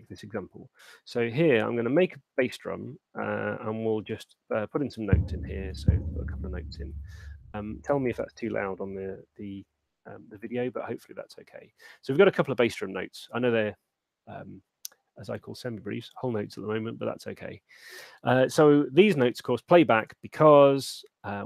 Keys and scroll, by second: 0.9 Return, 2.1 super+9, 4.1 6.